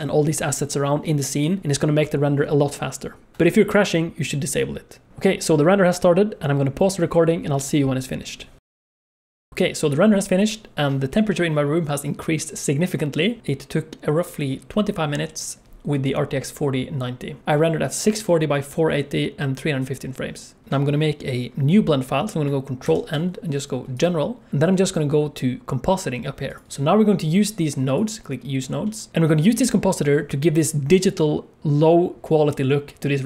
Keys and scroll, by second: 3.3 ctrl+s, 22.9 ctrl+n.